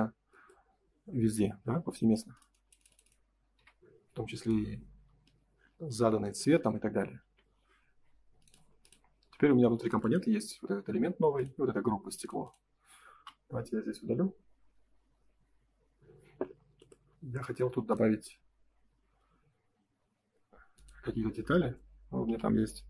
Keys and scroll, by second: 3.5 b, 5.5 space, 5.7 Escape, 7.1 ctrl+s, 13.1 Delete, 21.4 space, 22.2 l.